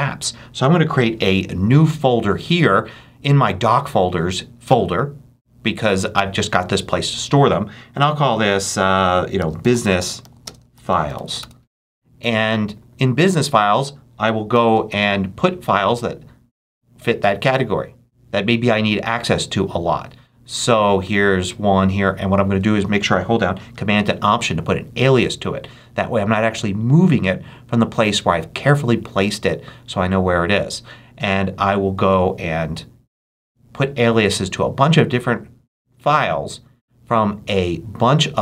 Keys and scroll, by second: 9.0-11.7 typing.